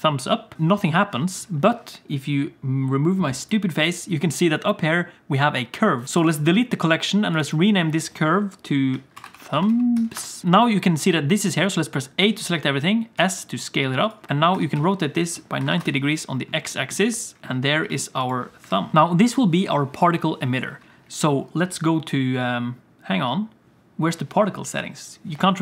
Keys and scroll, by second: 7.0 x, 8.2 ctrl+z, 12.2 a, 13.1 s, 14.3 s, 14.5 r, 17.8 g, 18.6 KP_1, 18.9 g.